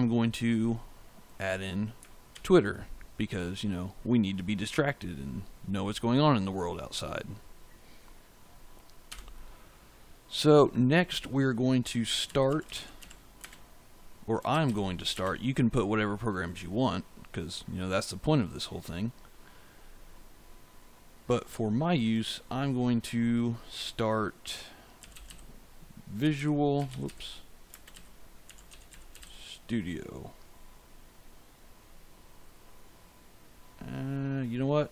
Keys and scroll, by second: 2.2 ctrl+v, 9.0 Return, 11.9-13.4 typing, 14.4 shift+', 15.0 space, 24.6-29.6 typing.